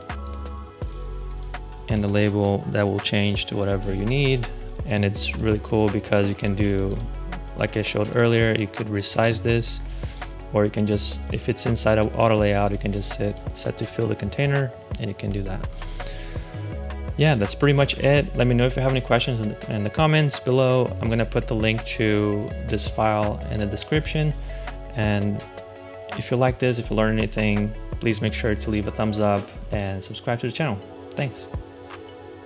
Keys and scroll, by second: 4.6 super+z, 5.4 space, 15.7 space.